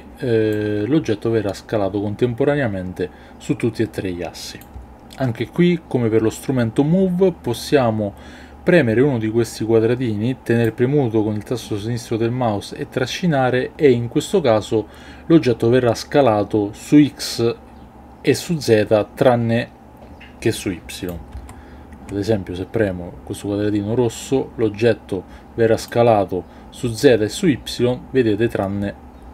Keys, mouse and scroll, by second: 0.6-4.6 drag, 10.7-21.1 drag, 21.4 ctrl+z, 26.0-29.3 drag.